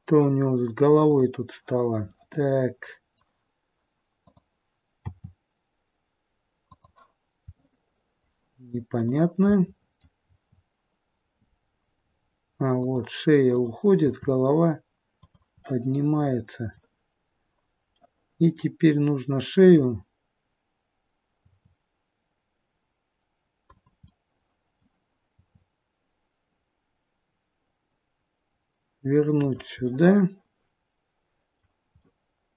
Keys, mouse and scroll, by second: 0.4-1.1 scroll up 2, 1.1 click, 2.1 middle click, 4.2 click, 5.0 r, 7.5 middle click, 9.0 click, 9.5 middle click, 10.2 r, 13.5 click, 14.0 r, 15.7 middle click, 17.9 middle click, 19.6 click, 21.5 r, 24.1 middle click, 25.2 r, 29.8 middle click, 32.0 middle click.